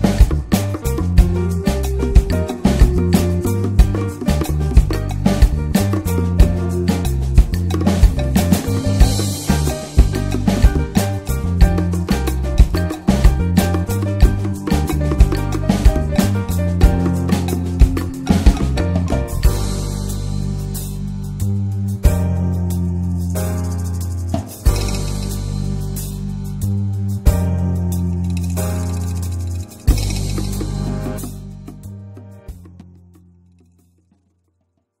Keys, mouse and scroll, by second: 0.5-1.2 middle drag, 1.2 click, 1.7-4.8 middle drag, 4.8-6.3 drag, 6.3-8.0 middle drag, 8.0 ctrl+scroll down 1, 8.7-9.1 ctrl+scroll down 1, 9.3 ctrl+scroll down 1, 9.9 ctrl+scroll down 1, 10.5 ctrl+scroll down 1, 11.1 ctrl+scroll down 1, 11.7-12.2 ctrl+scroll up 2, 12.8-13.8 ctrl+scroll down 2, 13.8 ctrl+scroll down 1, 14.4 ctrl+scroll down 1, 15.0 ctrl+scroll down 1, 15.6 ctrl+scroll up 1, 16.1 ctrl+scroll up 1, 16.8 ctrl+scroll up 1, 17.4 ctrl+scroll up 1, 19.0-20.2 middle drag, 20.2 click, 21.4-22.0 ctrl+scroll down 2, 22.7 ctrl+scroll down 1, 23.3 ctrl+scroll down 1, 23.8 ctrl+scroll up 1, 25.3-27.2 middle drag, 27.2-30.2 drag, 30.2-35.0 middle drag.